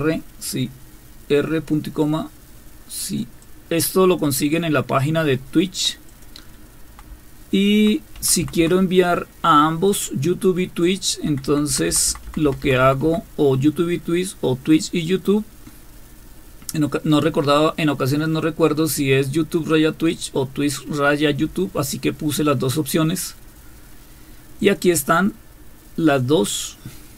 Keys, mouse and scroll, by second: 3.0 click, 3.4 click, 6.1 click, 6.5 Down, 7.1 Down, 7.7 Down, 8.0 Down, 8.1 Down, 8.6 Down, 9.8-11.0 drag, 11.2 Down, 11.4 Down, 11.9 Down, 12.2 Down, 12.4 Down, 12.6 Down, 12.8 Down, 13.0 Down, 18.2-20.1 drag, 24.6 click.